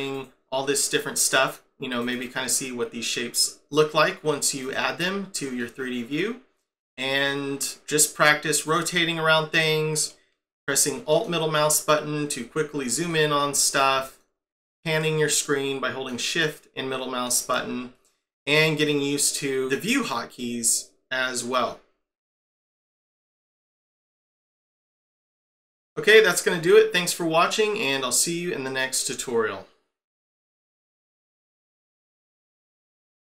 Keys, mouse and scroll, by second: 0.8 middle click, 2.0 right click, 2.2 right click, 5.6 middle click, 8.7 click, 8.9 middle click, 12.4-13.1 scroll down 7, 13.1 shift+middle click, 13.7 click, 14.0 alt+middle click, 16.4 shift+middle click, 17.4-17.9 scroll down 6, 19.3 middle click, 22.5-25.1 typing, 26.3 middle click.